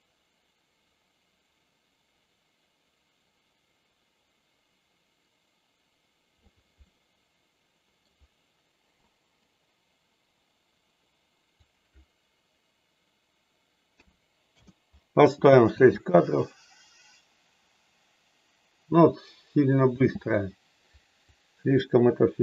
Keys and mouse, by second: 6.8-8.0 middle drag, 11.6-14.8 drag, 15.6 space, 19.8 space, 21.2-22.4 drag.